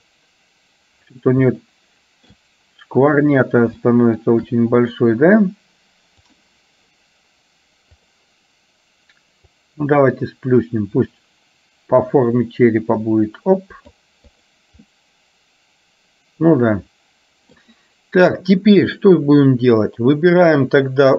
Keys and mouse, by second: 1.8 shift+middle click, 3.9 shift+middle click, 4.9 click, 8.0 click, 9.5 click, 9.8-14.0 drag, 14.4 click, 15.0-17.7 middle drag.